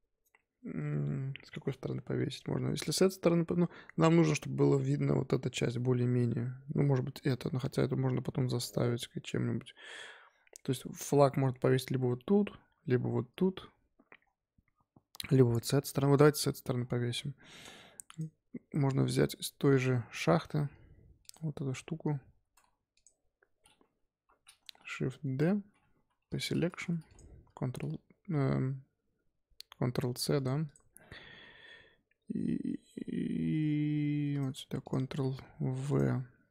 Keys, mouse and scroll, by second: 14.2-14.6 scroll down 4, 14.6-15.2 scroll up 3, 16.8-18.1 scroll down 8, 18.1 click, 20.2-21.2 scroll up 10, 21.2 click, 21.9 z, 22.6 Tab, 22.9 click, 24.1 l, 24.9 shift+d, 26.2 p, 26.6 Tab, 27.0 click, 27.4 ctrl+c, 30.6 click, 34.8 click, 35.1 ctrl+v, 35.9 click.